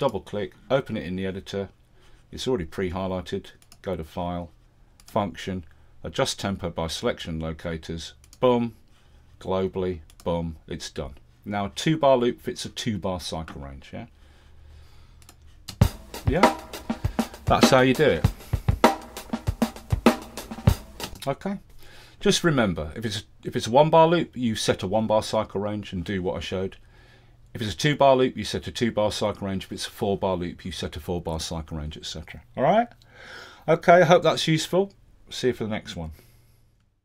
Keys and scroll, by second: 15.7 space, 21.1 space.